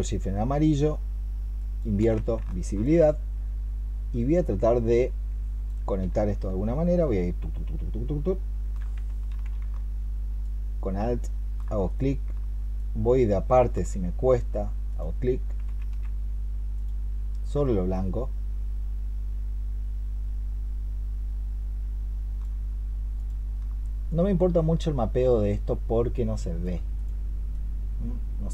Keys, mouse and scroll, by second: 0.0 ctrl+shift+click, 1.4 ctrl+shift+click, 2.3 alt+click, 6.9 alt+click, 9.2 ctrl+z, 12.6 alt+click, 15.7 ctrl+z, 17.8 alt+click, 23.9 alt+click.